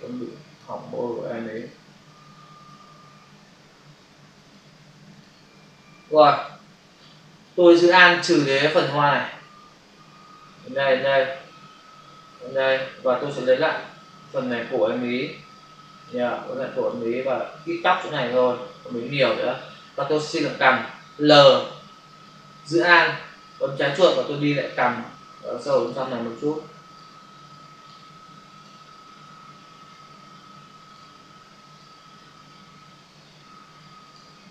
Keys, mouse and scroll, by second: 1.1 alt+click, 2.1 alt+click, 4.4 click, 5.1 click, 5.2 double click, 6.1 space, 8.9 alt+click, 13.7 click, 15.4 click, 16.4 click, 17.5 click, 19.1 click, 24.6 alt+click, 28.4 click, 28.6 double click, 30.9 click, 31.7 click, 31.8 double click, 33.9 click.